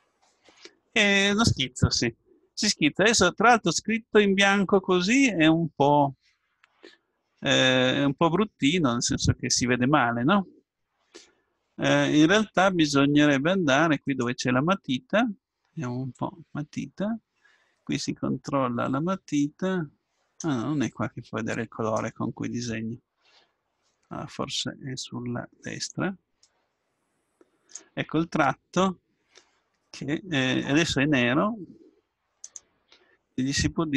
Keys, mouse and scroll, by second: 6.7-10.2 middle drag, 14.1-16.0 drag, 16.1-18.9 drag, 25.9-27.8 drag, 32.4-33.9 drag.